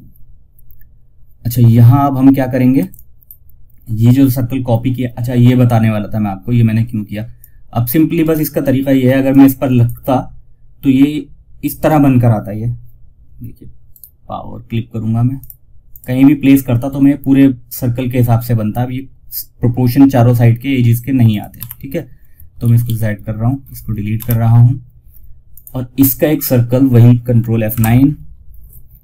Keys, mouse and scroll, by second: 2.1 F2, 2.2-4.5 drag, 4.5-5.0 scroll down 1, 6.7 click, 7.5 right click, 8.6-13.2 drag, 13.2 right click, 14.7 click, 20.6 click, 21.9 ctrl+z, 24.8 click, 27.0 ctrl+F9.